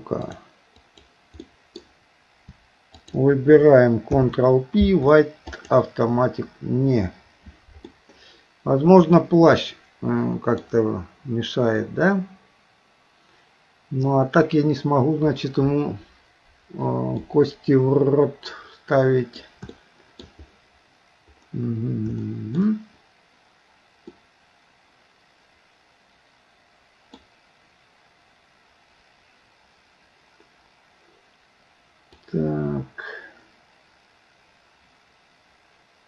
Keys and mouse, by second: 1.0 click, 1.5 middle click, 3.0 shift+click, 4.1 ctrl+p, 7.9-10.6 middle drag, 17.3-19.4 middle drag, 19.8 shift+middle click, 22.3 shift+middle click, 24.2-27.2 middle drag, 32.3-36.0 drag.